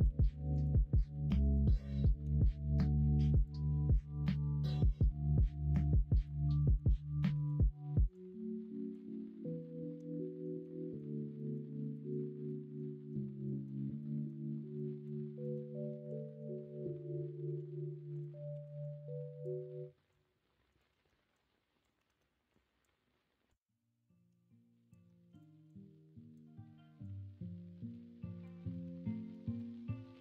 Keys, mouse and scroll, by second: 0.0 x, 2.2 x, 2.8 x, 5.9 click, 6.5 middle click, 10.6 middle click, 10.6 scroll up 1, 10.9 scroll down 1, 11.3 scroll up 1, 11.5-11.9 scroll down 1, 11.9 scroll up 1, 12.1-12.4 scroll down 1, 12.4 middle click, 13.4 middle click, 13.9 middle click, 14.2 scroll down 1, 14.7-15.0 scroll up 1, 15.4 middle click, 16.0 KP_1, 16.2 KP_3, 17.4 1, 18.5 2, 19.2-20.8 drag, 20.9 ctrl+z, 21.5 click, 22.0 ctrl+z, 28.6 ctrl+z, 29.1 ctrl+r.